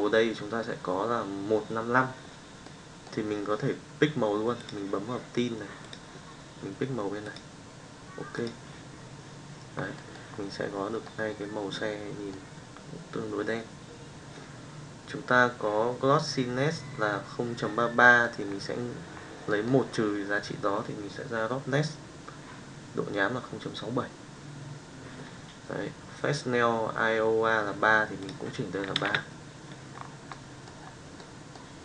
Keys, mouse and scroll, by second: 2.8 middle click, 9.9 middle drag, 11.0-12.3 middle drag, 18.0 middle click, 19.6 middle click, 28.3 click, 30.3-30.8 middle drag, 31.1 middle click.